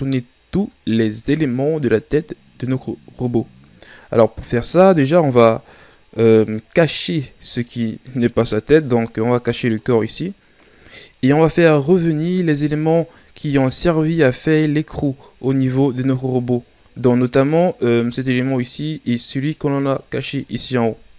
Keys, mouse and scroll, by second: 7.6-9.8 right drag, 9.8-13.5 drag, 13.5 shift+scroll up 4, 13.9 middle click, 14.4-16.6 scroll up 3, 17.8-19.9 right drag, 19.9-21.1 drag.